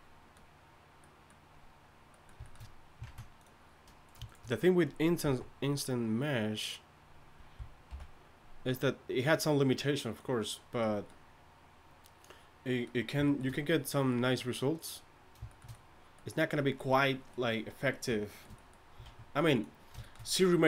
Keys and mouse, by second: 3.0 ctrl+Tab, 5.2 x, 7.9 alt+m, 19.1 ctrl+Tab.